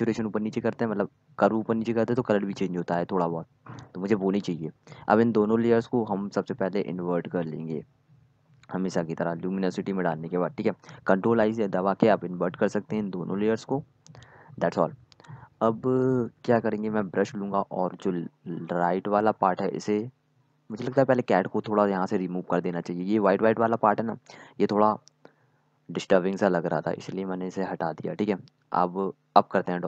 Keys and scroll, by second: 0.0-0.7 typing, 11.6 ctrl+i, 13.3 ctrl+i, 14.4-14.8 typing, 16.1 typing, 17.3-18.5 typing, 21.8 z, 23.9 x, 28.0 z, 29.1-29.8 typing.